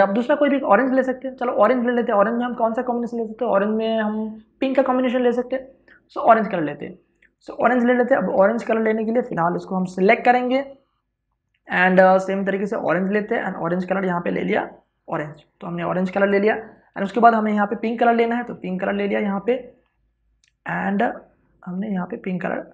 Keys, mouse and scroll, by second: 6.0 click, 7.5 space, 7.6 ctrl+click, 9.5 w, 10.3 click, 15.8 alt+BackSpace, 16.2 ctrl+d, 17.6 v, 18.0 click, 18.2 w, 18.4 click.